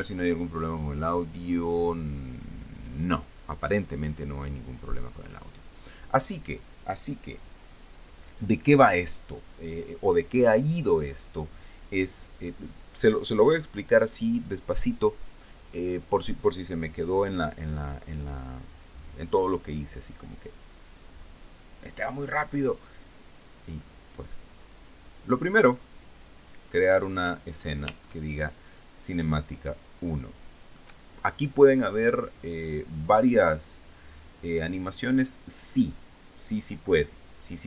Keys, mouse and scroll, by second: 1.3 click, 3.8 click, 5.4 click, 26.5 click, 27.5 click, 28.7-37.6 shift+middle drag.